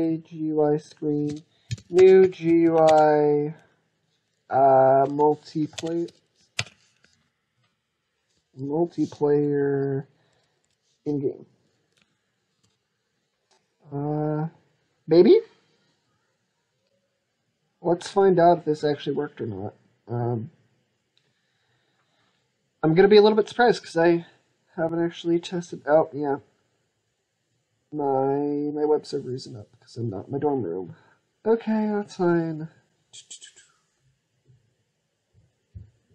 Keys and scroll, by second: 2.7 ctrl+space, 5.6 ctrl+space, 6.4 ctrl+space, 7.0 ctrl+space, 7.4 ctrl+space, 12.3 ctrl+s.